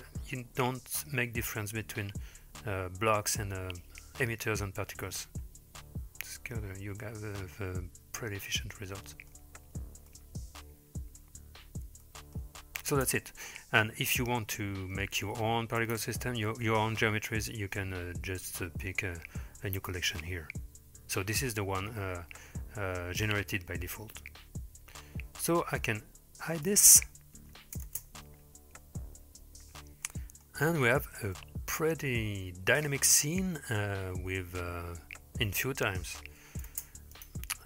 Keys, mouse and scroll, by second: 5.5-6.3 scroll down 1, 6.3-6.7 scroll down 1, 7.0 middle click, 8.8-9.3 middle drag, 10.1-11.2 middle drag, 12.1-12.4 middle drag, 13.0 space, 15.8 click, 26.7 click, 27.9 space, 30.1-30.5 middle drag, 30.8-31.2 scroll up 3, 31.4-31.7 shift+middle drag, 32.0-32.9 middle drag, 33.4-33.8 shift+middle drag, 36.7 space, 37.1 click.